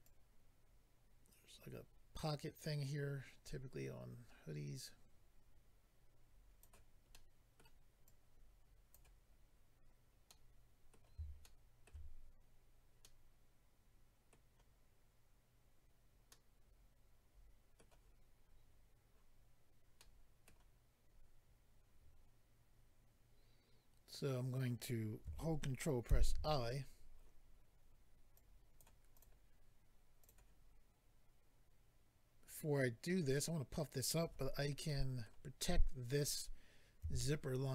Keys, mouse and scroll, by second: 0.0 click, 7.1 middle click, 8.0 click, 9.3-10.1 scroll down 1, 10.3 middle click, 11.4 shift+middle click, 11.8 middle click, 13.0 middle click, 16.2 middle click, 20.0 middle click, 26.1 ctrl+i, 28.3 click, 29.1 click, 29.2 click, 30.5 click, 34.9 middle click.